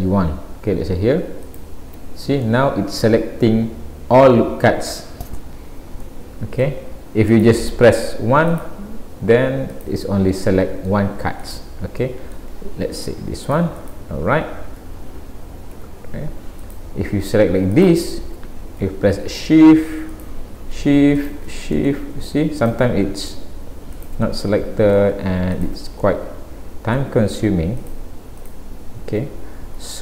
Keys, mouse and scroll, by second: 1.5 alt+click, 2.5 middle click, 6.0 middle click, 7.3 click, 8.5 click, 9.8 click, 10.5 middle click, 11.4 click, 12.0 middle click, 13.0 ctrl+r, 14.8 a, 15.8 alt+a, 16.6 click, 17.8 shift+click, 20.1 shift+click, 21.2 click, 21.7 middle click, 22.6 shift+click, 23.2 click, 24.5 middle click, 25.6 shift+click, 26.0 middle click, 27.8 shift+click, 29.8 a.